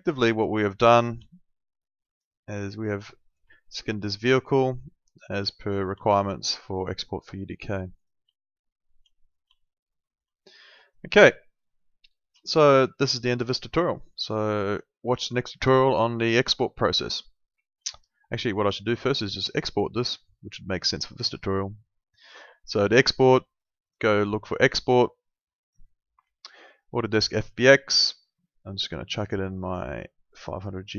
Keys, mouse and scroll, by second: 0.3 alt+middle click, 1.3 alt+middle click, 3.6 alt+middle click, 6.0 alt+middle click, 8.0 click, 8.4 alt+middle click, 9.6 alt+middle click, 17.9 alt+middle click, 19.2 alt+middle click, 19.5 click, 24.7 click.